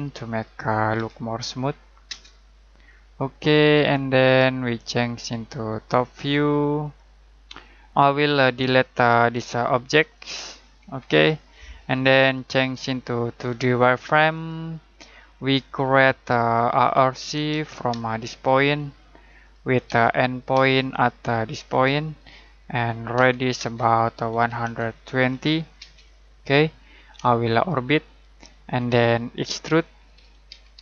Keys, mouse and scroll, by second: 0.9 typing, 2.0 Return, 3.6 scroll down 1, 4.7 middle click, 5.8 click, 8.2 scroll down 1, 8.5 middle click, 9.3 click, 10.8 Delete, 11.4 middle click, 11.8-13.4 scroll up 1, 13.4 click, 15.0 middle click, 15.3-16.1 scroll up 1, 16.1 middle click, 16.7-17.9 typing, 19.2 click, 19.8-20.5 typing, 22.1 click, 23.1-25.7 typing, 26.2-26.7 scroll down 1, 26.7 middle click, 27.3 shift+middle click, 28.8 middle click, 29.3-29.8 scroll up 1, 29.9-30.8 typing.